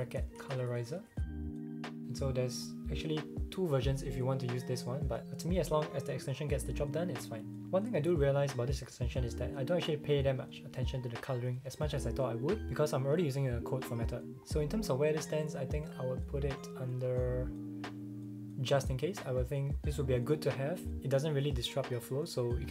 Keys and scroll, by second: 0.0-1.9 typing.